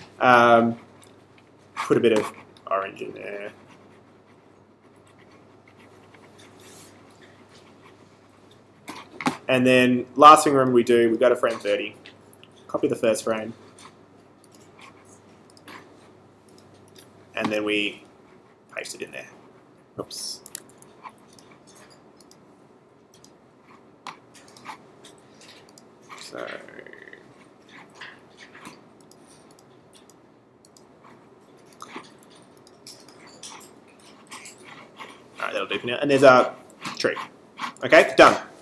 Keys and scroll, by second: 20.5 super+z.